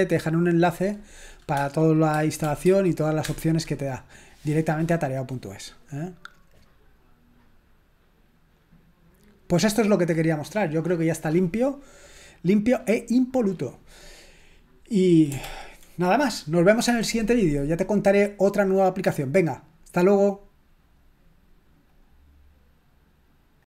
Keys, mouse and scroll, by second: 2.4 typing, 3.2 Return, 15.4 ctrl+l.